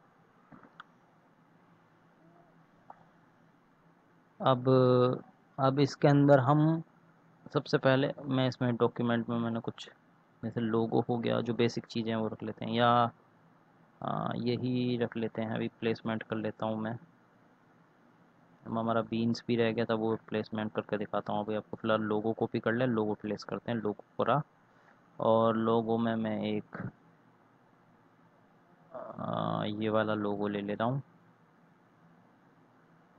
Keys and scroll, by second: 11.1 ctrl+c, 22.2 ctrl+v, 23.6 ctrl+a.